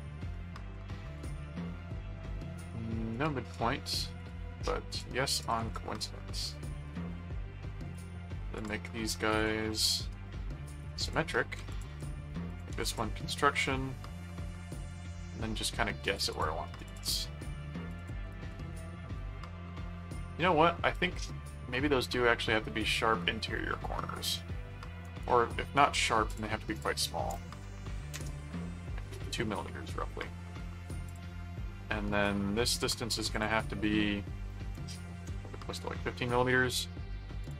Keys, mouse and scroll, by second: 0.1 click, 1.0 click, 3.1 click, 4.2 click, 4.9 ctrl+click, 6.9 click, 7.8 ctrl+click, 8.5 ctrl+click, 9.3 ctrl+click, 10.8 click, 11.7 alt+click, 12.3 alt+c, 12.5 alt+click, 12.7 alt+c, 14.9 click, 16.3 click, 17.9 ctrl+alt+click, 18.3 ctrl+alt+q, 18.7 right click, 25.0 right click, 25.8 right click, 26.3 click, 31.0 click, 32.7 click, 33.3 click, 37.4 click.